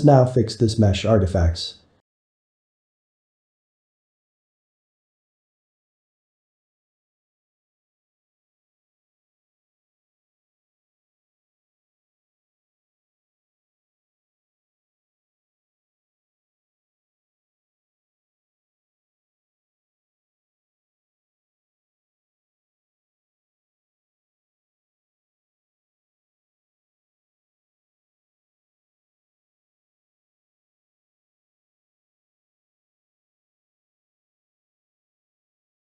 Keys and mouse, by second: 0.8 middle click, 2.2 middle click, 3.0 shift+click, 3.6 middle click, 4.3 g, 6.0 middle click, 6.3 3, 7.1 ctrl+middle click, 7.9 click, 8.6-10.1 middle drag, 10.1 click, 10.7 middle click, 11.5 x, 12.3 middle click, 13.1 click, 13.8-14.9 middle drag, 14.9 shift+click, 15.9 ctrl+z, 16.2 ctrl+z, 16.5 ctrl+z, 18.3 Tab, 19.1 click, 19.7 click, 20.3 x, 21.8 middle click, 22.2 click, 22.8 click, 23.4 click, 23.9 click, 24.3-26.4 middle drag, 26.4 ctrl+z, 26.6 ctrl+z, 27.1 ctrl+z, 27.6-29.6 middle drag, 29.6 shift+click, 30.3 shift+click, 30.8 shift+click, 31.2 shift+click, 31.6 shift+click, 32.0 shift+click, 33.2 shift+click, 34.1 shift+click, 34.6 shift+click, 35.2-35.9 middle drag.